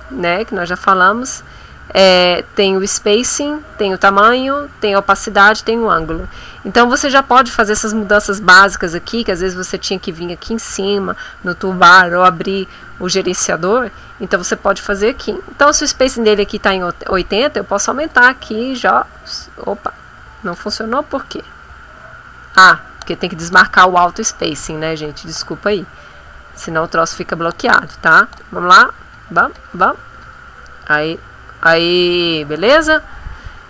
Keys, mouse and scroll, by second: 17.0 click, 18.0 click, 18.7 click, 19.9 click, 21.4 right click, 23.0 click, 24.0-27.0 drag, 27.7 click, 28.3 click, 29.1 click, 29.5 click, 30.2 click, 31.0-32.4 drag.